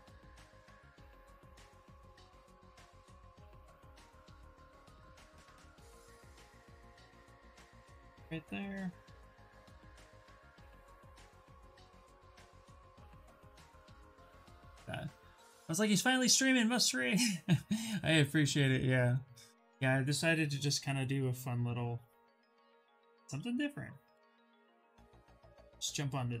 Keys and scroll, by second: 2.4 q, 6.7 ctrl+space, 9.4 w, 11.4 q, 12.5 w, 14.1 q, 23.7 w.